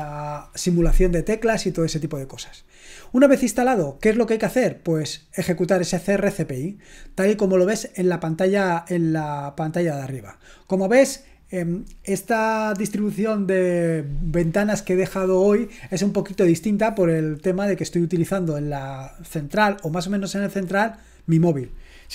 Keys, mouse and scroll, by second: 8.7 click.